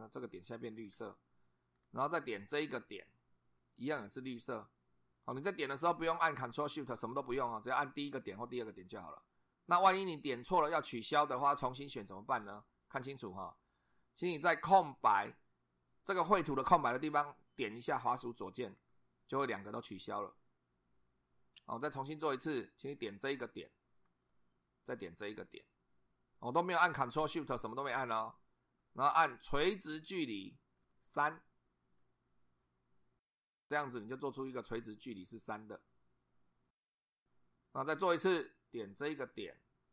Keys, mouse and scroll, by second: 0.7-1.7 scroll down 2, 1.7 scroll down 1, 2.9 click, 18.8 click, 24.0 click, 26.9 click, 30.1 click, 31.1 3, 32.0 click, 33.4-37.2 drag, 38.8 click.